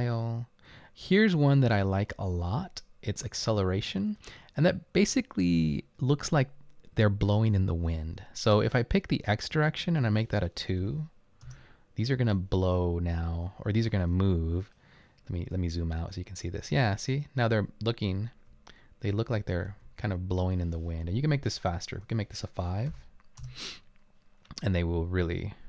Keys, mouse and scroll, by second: 10.8 2, 11.5 Return, 14.1 right click, 15.7-17.0 typing, 18.1-19.7 typing, 22.9-24.0 typing.